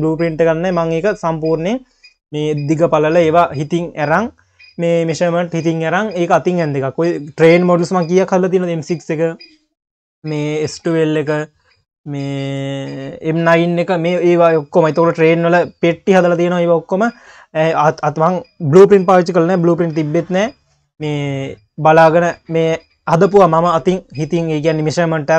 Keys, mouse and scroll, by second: 17.0-17.4 scroll down 5, 18.1 scroll down 7, 19.7-22.3 scroll down 2.